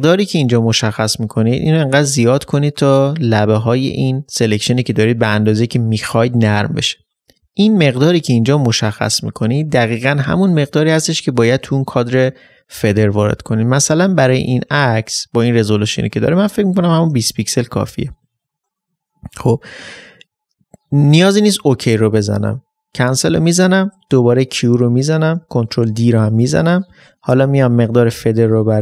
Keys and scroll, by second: 25.3 ctrl+d.